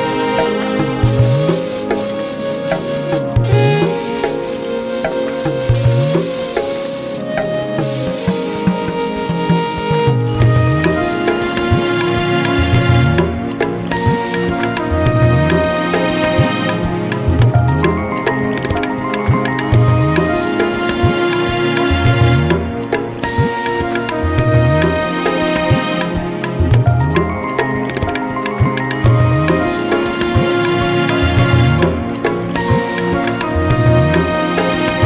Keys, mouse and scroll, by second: 1.0 click, 1.5 g, 2.0 click, 2.4 g, 3.0 click, 3.4 g, 5.8 click, 7.1 g, 7.7 shift+click, 7.9 shift+click, 8.1 g, 9.1 Tab, 10.3 click, 10.9 x, 11.3 KP_7, 11.5 scroll down 2, 11.9 click, 13.9-14.3 scroll down 2, 14.3 g, 16.6 shift+d, 18.3 ctrl+z, 18.5 ctrl+z, 19.0 shift+g, 19.4 shift+d, 20.5 ctrl+z, 21.0 ctrl+shift+z, 21.4 shift+r, 21.7 ctrl+z, 21.9 ctrl+z, 22.1 click, 22.4 shift+d, 23.5-24.0 shift+r, 24.9 shift+r, 25.3-25.9 drag, 25.9 Tab, 26.0 a, 26.0 s, 27.7 Tab, 28.0 drag, 28.3 shift+click, 28.7 shift+drag, 29.3 shift+click, 29.8 shift+d, 33.4 g, 34.7 Tab, 34.9 Tab, 35.0 scroll down 1.